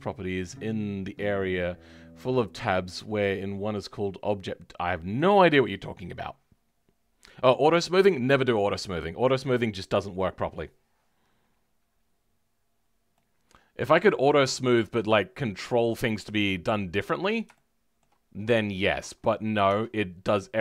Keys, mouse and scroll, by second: 12.2-12.7 scroll up 2, 13.1-17.0 middle drag, 17.0-17.5 scroll up 1, 17.5-18.7 shift+middle drag, 18.7-19.1 scroll down 2, 19.1 scroll up 2, 19.6 Tab, 20.0-20.6 scroll up 3.